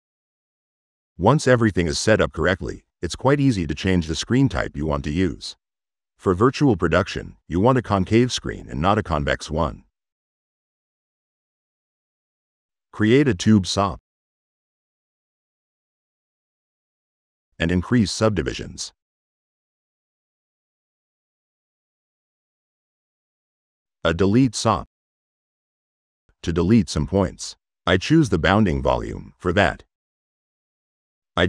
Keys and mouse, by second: 10.3 click, 11.0 click, 11.3 Tab, 13.7 click, 14.1 click, 14.7 middle click, 15.2 click, 15.4 click, 16.3 click, 17.1 drag, 17.7 drag, 19.5 click, 22.3 click, 24.6 click, 25.4 click, 26.5 click, 27.3 click, 28.0 click, 28.7 click, 29.7 click, 30.0 click, 31.2-31.4 middle drag.